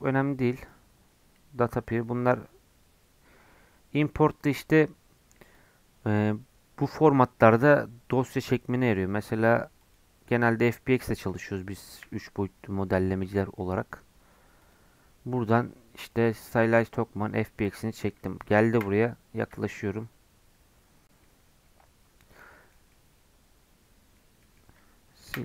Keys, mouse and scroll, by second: 18.7 KP_Decimal, 19.7-20.6 scroll down 5, 20.6-21.2 scroll up 1, 21.2-24.3 middle drag, 24.3 scroll down 1, 24.4 middle click, 24.6-25.3 scroll up 1, 25.3 Delete.